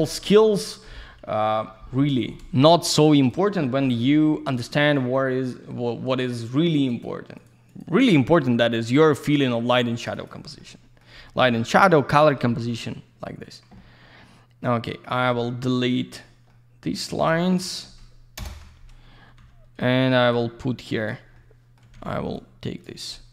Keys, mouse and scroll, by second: 0.3 alt+middle click, 2.0 F2, 2.4 scroll up 1, 3.2 click, 3.7 middle click, 4.8 click, 6.9 ctrl+click, 7.3 ctrl+click, 7.7 ctrl+click, 7.8 ctrl+double click, 8.8 click, 9.0 click, 9.1 double click, 9.9 ctrl+click, 10.1 ctrl+click, 10.6 alt+middle click, 11.1 scroll down 1, 13.7 alt+middle click, 15.7 alt+click, 16.5 alt+middle click, 17.3 scroll up 1, 18.4 ctrl+BackSpace, 19.4 2, 20.1 alt+middle click, 20.3 click, 22.3 click, 23.1 alt+middle click.